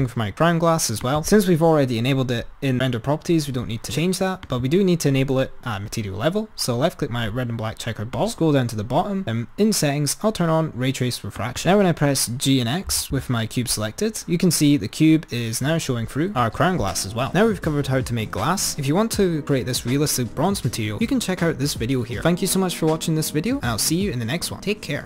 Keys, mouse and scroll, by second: 1.2 click, 5.5 click, 8.2-10.6 drag, 11.8 click, 12.0 click, 13.1 g.